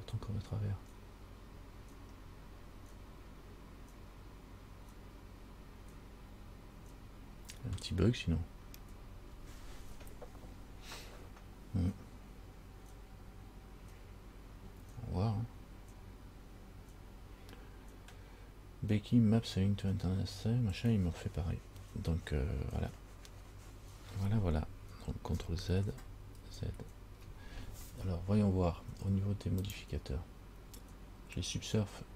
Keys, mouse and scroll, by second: 2.4-3.4 scroll up 4, 3.4-6.5 scroll up 2, 26.0 ctrl+z, 26.7 ctrl+z, 29.8 click.